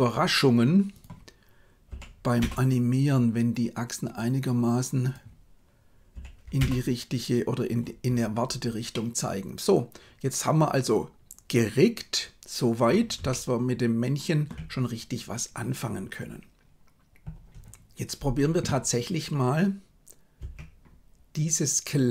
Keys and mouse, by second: 0.9-2.4 drag, 5.0-6.5 drag, 8.9-12.8 middle drag, 13.2-14.4 shift+middle drag, 20.4 Tab.